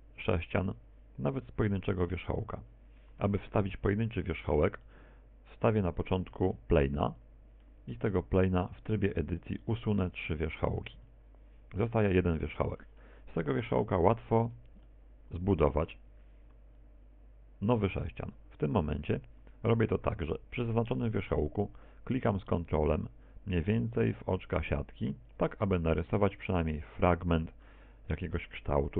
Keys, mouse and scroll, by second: 0.0 middle click, 2.2 Tab, 3.3 x, 5.7 KP_1, 6.9 shift+middle click, 8.0 shift+middle click, 8.4 shift+a, 9.7 middle click, 10.5 Tab, 11.2 right click, 11.7 shift+right click, 13.1 shift+right click, 13.1 x, 14.2 right click, 15.5 KP_1, 16.9 shift+middle click, 25.3 ctrl+click, 27.3 ctrl+click.